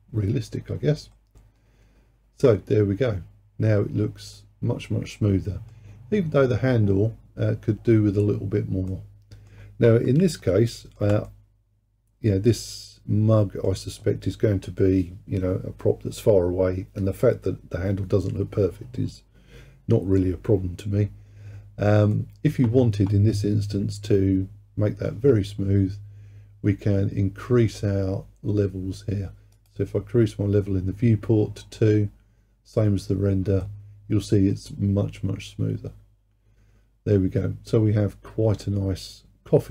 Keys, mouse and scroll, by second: 1.2-4.2 middle drag, 7.7-8.3 scroll down 2, 8.3-8.9 scroll up 2, 8.9-10.5 middle drag, 11.3-14.5 middle drag, 22.2-25.2 middle drag, 29.6-32.7 drag, 33.7-36.7 middle drag.